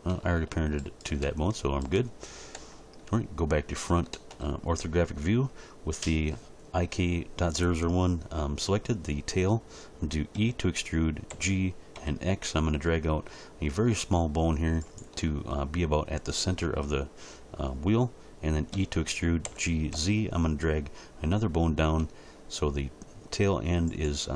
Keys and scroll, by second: 2.6 1, 10.4 e, 11.3 g, 12.0 x, 18.7 e, 19.5 g, 19.9 z.